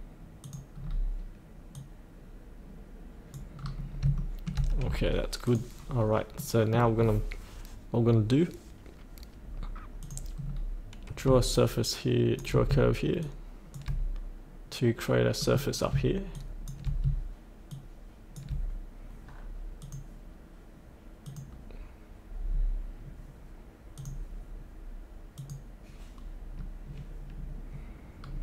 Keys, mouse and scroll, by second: 0.4 click, 0.8-1.7 scroll down 1, 1.7-3.5 drag, 3.5-4.0 scroll up 1, 4.2 shift+middle click, 5.4 click, 5.9-6.4 scroll up 1, 6.4 middle click, 7.0 scroll down 1, 10.0 click, 10.4-11.2 scroll down 1, 11.5 shift+click, 13.2 shift+click, 15.4 middle click, 16.3 shift+click, 19.8 click, 26.4-28.4 scroll up 1.